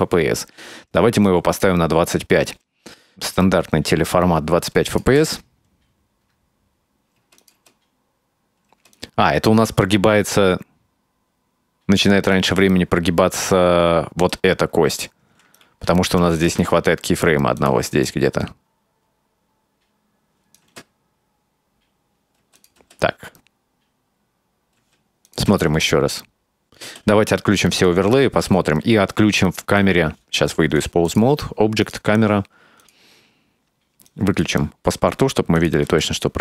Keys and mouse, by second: 0.1-1.8 drag, 5.0 click, 5.2 space, 7.2 space, 7.4 click, 7.6 space, 8.8 space, 9.0-13.6 drag, 14.3 right click, 15.6-16.0 right drag, 16.4 shift+d, 18.1-20.6 drag, 20.7 space, 22.5 space, 22.6 click, 22.8 space, 24.8 space, 25.3 click, 25.5 space, 26.9 space, 27.9 click, 30.9 click, 31.9 click, 32.9 click, 34.2 click, 35.6 click, 35.9 space.